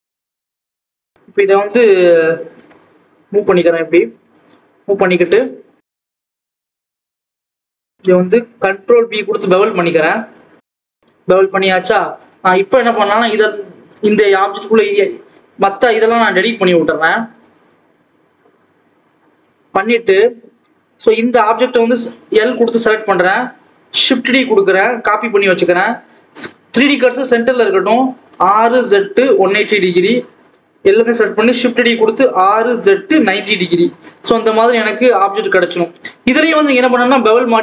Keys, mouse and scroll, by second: 0.1 click, 0.6-1.3 scroll down 1, 2.4 g, 5.8 click, 6.3 scroll down 1, 6.7 click, 7.3 ctrl+b, 8.1 ctrl+b, 10.7 ctrl+s, 11.2 click, 11.8-12.3 scroll down 1, 12.3 alt+a, 12.8 l, 13.4 l, 15.3 alt+a, 15.9 l, 16.8 l, 17.8 x, 19.0-19.5 scroll up 1, 19.5 ctrl+s, 20.0-20.7 scroll down 1, 20.7 click, 22.5 l, 23.5 shift+d, 28.2 r, 30.2 a, 31.0 shift+d, 32.2 r, 33.9 Tab, 34.3 alt+a, 34.7 click, 36.0-36.4 scroll up 1, 36.4 click.